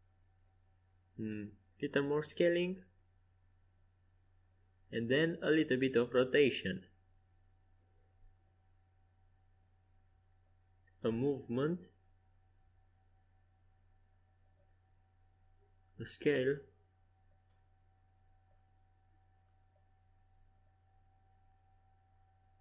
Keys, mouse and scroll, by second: 0.5 middle click, 2.2 s, 7.4 r, 8.2-10.3 drag, 10.3 r, 11.6 g, 13.5-14.8 drag, 15.7 s, 17.7 g.